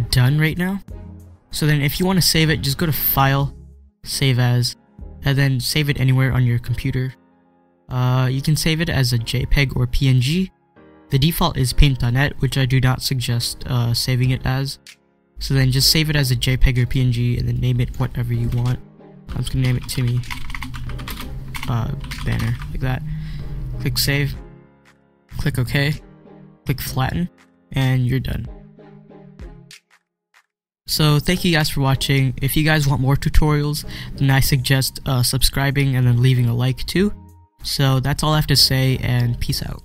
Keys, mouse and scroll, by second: 0.7-1.5 scroll down 1, 3.0 click, 6.1 scroll up 1, 7.0 click, 16.8-19.5 drag, 19.3-22.9 typing, 23.9 click.